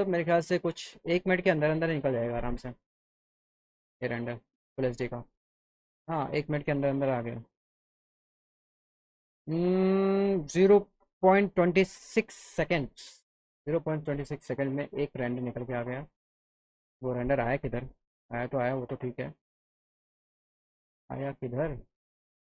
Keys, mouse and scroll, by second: 18.8 click.